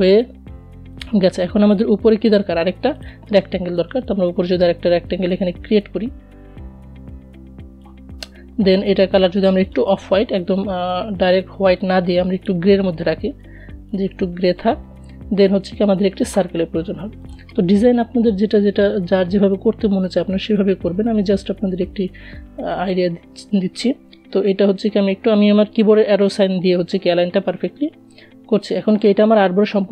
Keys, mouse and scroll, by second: 14.5 right click, 15.5 click, 17.4-18.4 alt+scroll up 1, 19.1-21.7 drag, 21.7 v, 22.7 shift+Left, 26.9 click.